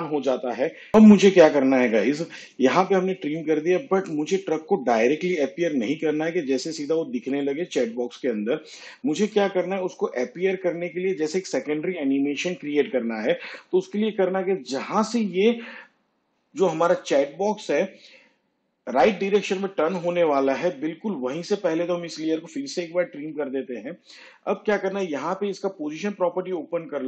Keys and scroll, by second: 0.2 alt+[, 23.0 alt+[.